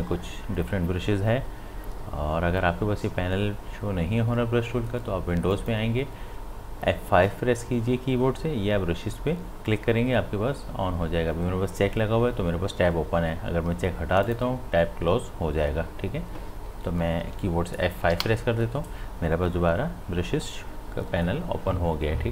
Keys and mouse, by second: 5.5 click, 14.2 click, 18.1 F5.